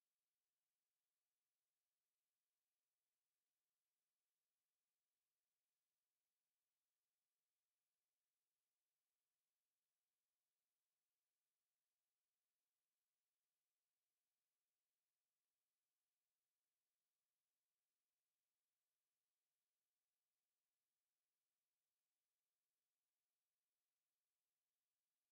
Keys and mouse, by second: 0.3 click, 1.3 alt+click, 1.8 click, 2.2 right click, 7.2 r, 8.0 click, 12.8 alt+click, 15.6 alt+right click, 16.1 alt+click, 17.7 click, 18.0 alt+click, 18.5 right click, 19.4 alt+click, 20.2 click, 21.6 w, 22.4 click.